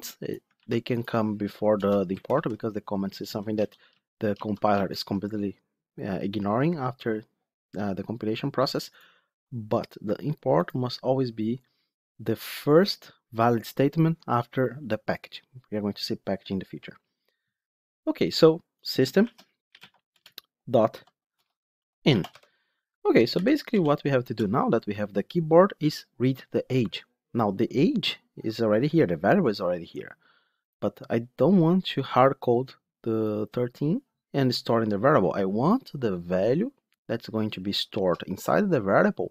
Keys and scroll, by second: 0.5 ctrl+x, 2.1 ctrl+x, 2.2 ctrl+v, 3.1 ctrl+z, 4.2 ctrl+z, 20.0 Return.